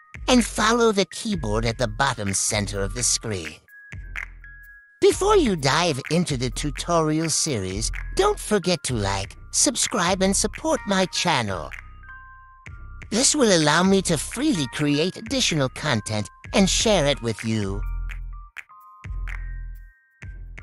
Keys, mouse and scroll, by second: 1.6 click, 4.0 click, 6.9 click, 9.0 click, 11.2 click, 13.1 click, 20.1 click.